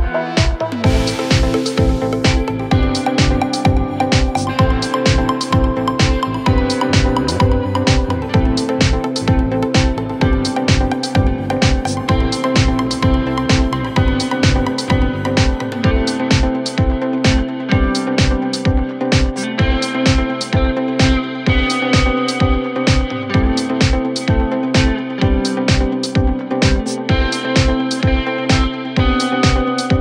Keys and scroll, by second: 15.0 F3, 15.3 Escape, 15.9 F3, 16.1 Escape.